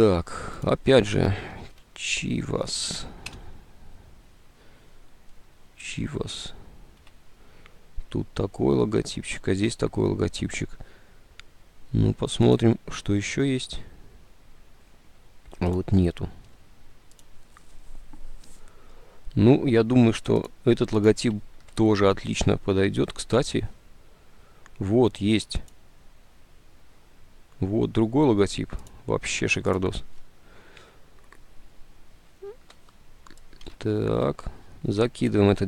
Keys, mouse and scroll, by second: 1.3-3.3 typing, 3.3 Return, 8.6 alt+Tab, 33.9 alt+Tab.